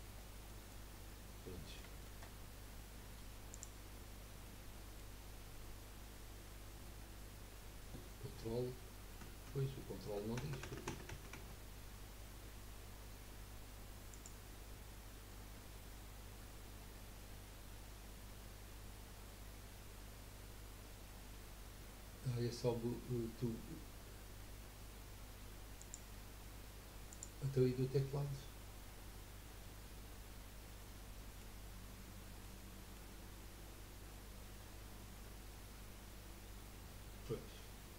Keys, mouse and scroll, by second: 0.1-0.5 scroll up 2, 0.5 middle click, 0.9-1.6 scroll down 3, 1.6-3.5 middle drag, 3.5 click, 4.4-7.5 middle drag, 14.1 click, 25.8 click, 29.7-32.2 middle drag, 32.2 scroll down 1, 32.4 middle click, 33.1-34.0 scroll up 4, 34.2 scroll down 4.